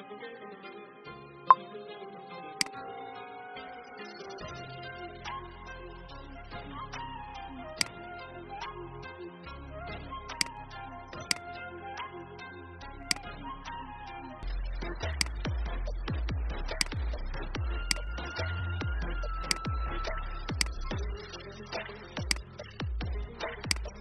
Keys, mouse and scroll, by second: 0.4 typing, 5.4 ctrl+x, 6.2 ctrl+b, 7.6 click, 11.1 shift+click, 13.0 click, 14.4 F10, 15.2 click.